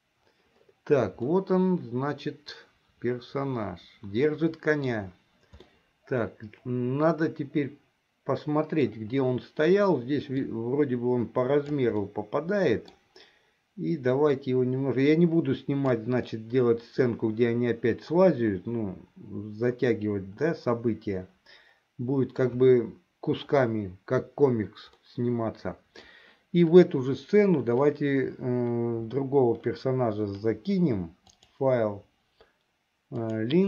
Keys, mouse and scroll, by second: 1.7-5.2 middle drag, 5.9-9.0 middle drag, 10.8-12.1 drag, 12.2-13.3 middle drag, 14.5-16.4 drag, 16.5-22.5 middle drag, 25.2-26.4 middle drag, 31.4-33.6 drag.